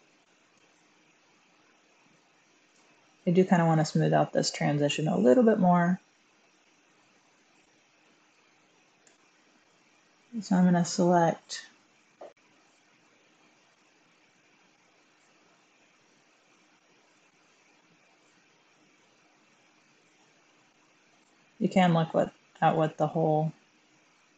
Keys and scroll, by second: 4.8 Tab, 6.2 1, 6.3 Tab, 8.9 Tab, 12.3 Tab, 12.3 1, 17.0 Tab, 20.6 1.